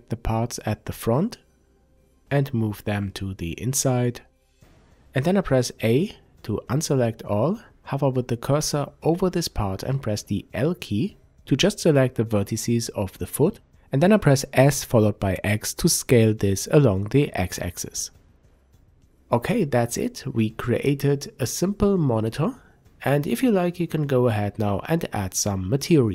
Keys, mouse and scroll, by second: 0.0-14.7 drag, 4.9 a, 5.8 a, 7.1 l, 9.2 s, 14.9-15.3 scroll down 1, 15.3-18.4 middle drag, 16.1 Tab, 18.4 click, 19.8 scroll down 1, 20.3-26.1 middle drag, 21.8 KP_5, 22.6-23.0 scroll down 1, 24.3-24.9 scroll up 2, 24.9-25.2 scroll up 1.